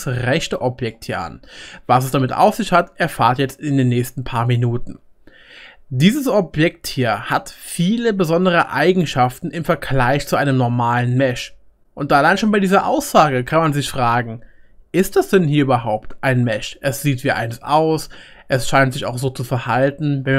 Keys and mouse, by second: 6.1-10.5 drag, 10.5-20.3 right drag, 16.8-20.3 middle drag.